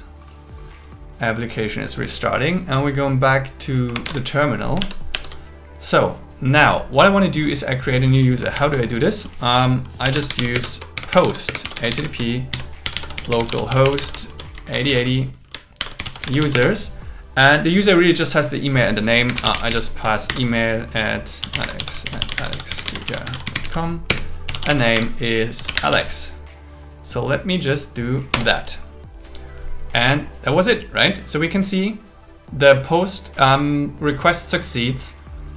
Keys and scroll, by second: 4.0 ctrl+t, 5.0 super+1, 8.6 ctrl+l, 10.6 space, 11.5 space, 12.5 shift+., 12.8 shift+7, 14.2 shift+., 15.8 shift+7, 16.5 space, 20.3 shift+0, 22.0 alt+l, 24.1 space, 24.9 shift+0, 25.6 shift+a, 28.3 Return.